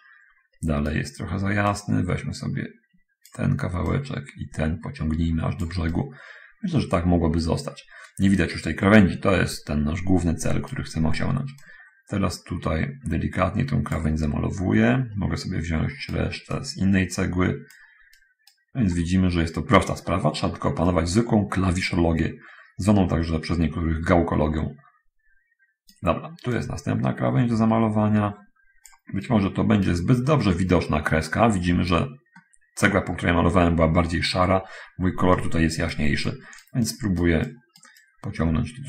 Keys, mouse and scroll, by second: 0.0-1.2 right drag, 2.0-3.7 drag, 6.2-11.2 right drag, 11.8-14.3 drag, 14.3-16.6 right drag, 16.8-18.2 drag, 18.4-19.0 right drag, 19.0-21.1 middle drag, 21.2-26.3 right drag, 26.6-29.3 drag, 29.3-30.3 right drag, 30.8-32.3 right drag, 32.3-33.4 middle drag, 35.5-36.4 right drag, 36.6-38.2 right drag.